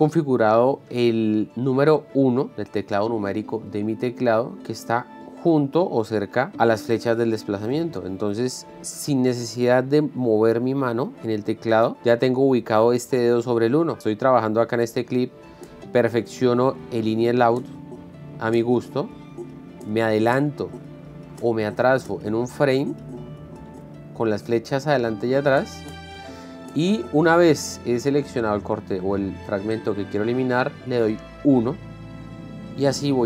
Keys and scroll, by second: 15.8 Left, 17.3 o, 18.0 Right, 18.6 o, 18.9 Left, 19.4 o, 19.8 Right, 21.8 Right, 22.3 Left, 23.2 Right, 23.8 Left, 25.8 Right, 26.3 Left, 27.5 Right, 27.8 o, 31.3 End.